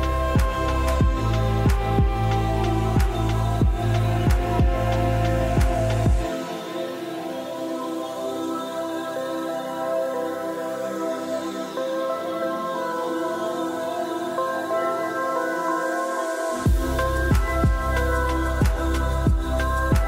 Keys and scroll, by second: 11.5 BackSpace, 12.6-13.9 typing.